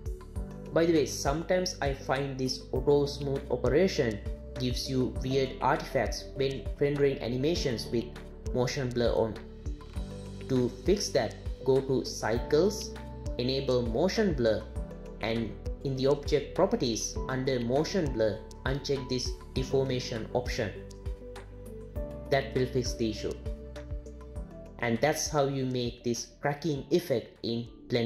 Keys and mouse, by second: 6.5 click, 12.3-13.1 drag, 15.1 click, 16.9 click, 22.6 click.